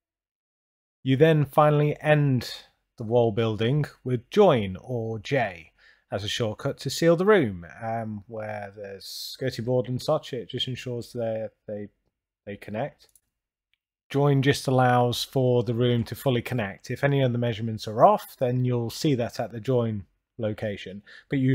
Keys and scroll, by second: 0.8 9, 1.5 Return, 3.4 Return, 4.5 j, 5.6 Return, 18.0 Return, 19.7 Return.